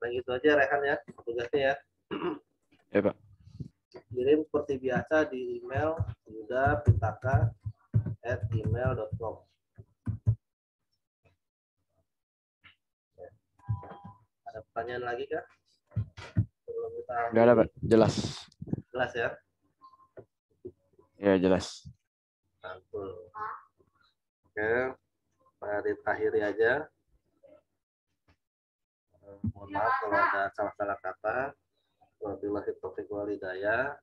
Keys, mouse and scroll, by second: 2.7 click, 4.0 t, 4.6 click, 5.7 y, 7.6-8.2 typing, 10.0 typing, 11.9 click, 13.9 ctrl+t, 15.3 alt+shift+click, 16.3 Return.